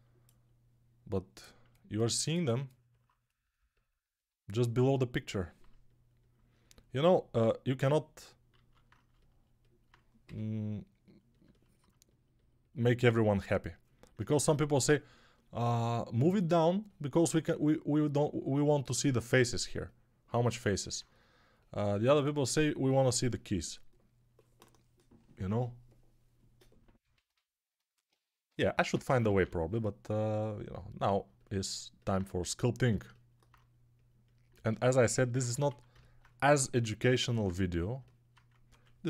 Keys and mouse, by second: 6.8 alt+q, 8.7 alt+q, 10.1 g, 12.9 2, 28.3-29.3 typing, 34.4-39.0 alt+shift+drag, 34.4-39.0 alt+shift+middle drag, 34.4-39.0 alt+shift+right drag, 35.5 1.